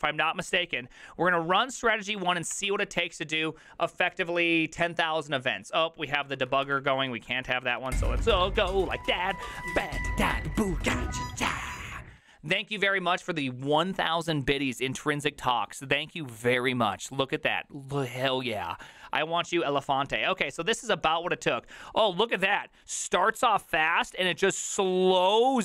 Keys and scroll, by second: 6.4 ctrl+c, 6.5 ctrl+c, 6.6 Up, 6.8 ctrl+Left, 7.0 ctrl+Left, 7.4 ctrl+Left, 7.9 ctrl+w, 8.2 BackSpace, 8.4 BackSpace, 8.9 BackSpace, 8.9 Return.